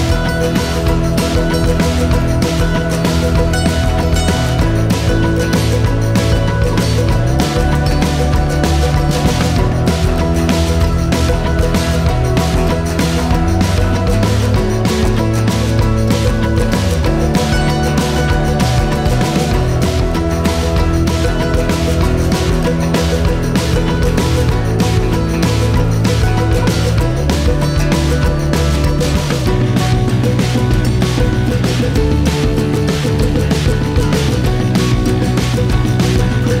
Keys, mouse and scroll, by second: 0.8-1.3 scroll up 2, 1.3 middle click, 1.8 scroll down 2, 2.1 middle click, 2.5 shift+click, 3.0 middle click, 3.9 shift+click, 4.3 shift+middle click, 4.6 shift+click, 5.3 shift+click, 5.7 middle click, 6.5 shift+click, 7.0 shift+click, 7.5-9.1 middle drag, 9.9-11.4 middle drag, 14.7-15.9 scroll up 5, 15.9-17.6 shift+middle drag, 19.8 middle click, 20.7 shift+click, 22.1-22.6 scroll up 9, 24.7 r, 28.4-28.8 scroll down 11, 30.0-31.9 drag, 33.5-34.1 scroll up 8, 34.7-36.3 shift+drag.